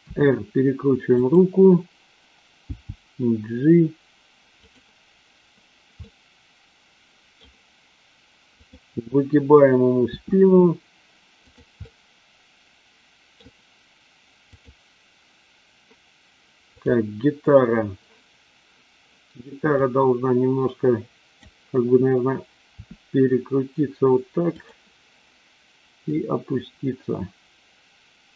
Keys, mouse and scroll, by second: 0.0 r, 1.1 click, 2.8 g, 4.5 click, 6.0-7.4 middle drag, 8.6 click, 10.1 r, 11.9-13.4 middle drag, 14.5 click, 16.6 click, 19.8-21.5 drag, 22.6 r, 26.2-28.3 drag.